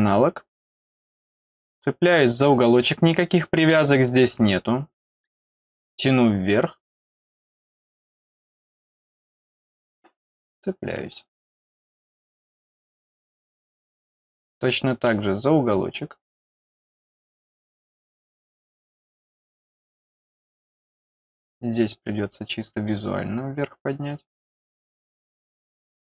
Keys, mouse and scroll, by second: 0.9 middle click, 0.9 scroll up 1, 1.1 middle click, 1.5 middle click, 1.7 scroll up 1, 3.6 click, 4.1-4.6 scroll down 2, 4.9-6.0 middle drag, 8.0-8.6 scroll up 2, 9.5 click, 11.8 middle click, 12.4 scroll down 1, 13.7 scroll up 1, 15.0-15.7 scroll up 3, 16.4 click, 17.3-17.7 scroll down 2, 17.8-18.8 middle drag, 20.0 middle click, 22.8 click, 25.8 scroll down 1.